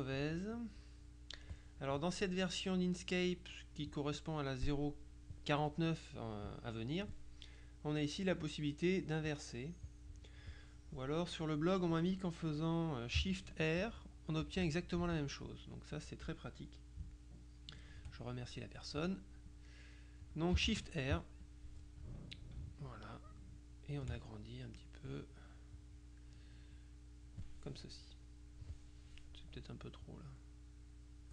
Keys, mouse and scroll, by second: 0.7 click, 8.5 click, 9.4 click, 13.9 shift+r, 19.5 click, 20.7 shift+r, 21.5 click, 22.8-24.6 ctrl+shift+drag, 24.9 click, 25.9 click, 26.8 click, 30.1-31.3 drag.